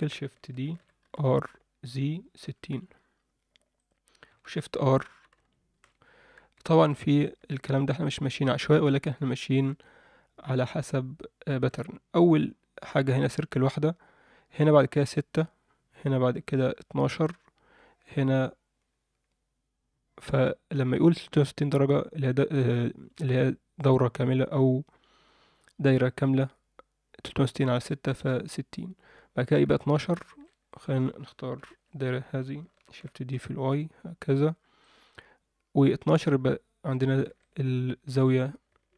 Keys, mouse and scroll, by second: 0.6 shift+d, 4.8 shift+r, 5.1 shift+r, 6.4-6.8 scroll down 2, 7.2 shift+middle click, 8.0-11.6 ctrl+middle drag, 18.0-21.1 scroll down 1, 21.2-22.8 scroll up 1, 29.8 Tab, 30.2 alt+shift+middle click, 30.6 click, 31.6 ctrl+l, 32.9 shift+d, 37.3 alt+shift+middle click.